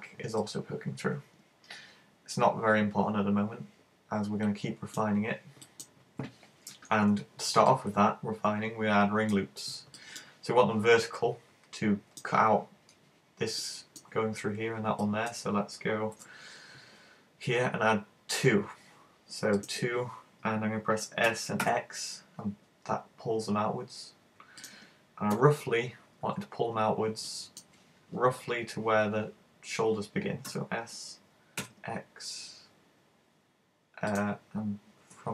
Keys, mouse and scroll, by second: 0.5 middle click, 5.7 middle click, 7.8 middle click, 13.7 middle click, 15.1 middle click, 16.2 ctrl+r, 19.7 click, 21.3 s, 24.7 click, 25.4 KP_1, 26.3 z, 26.8-27.1 scroll up 3, 27.3 shift+middle click, 34.2 click.